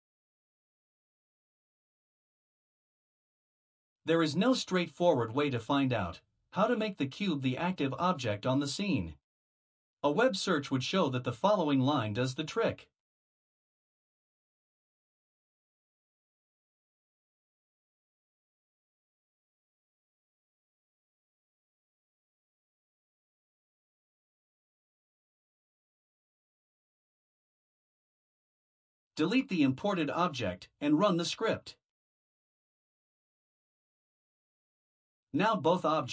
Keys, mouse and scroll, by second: 0.6 shift+c, 1.2 u, 2.0 b, 2.4 e, 4.9 click, 7.4 Return, 11.0-19.9 typing, 21.7-22.8 typing, 23.6 ctrl+alt+9, 26.6 click, 29.3 Delete, 35.1 click.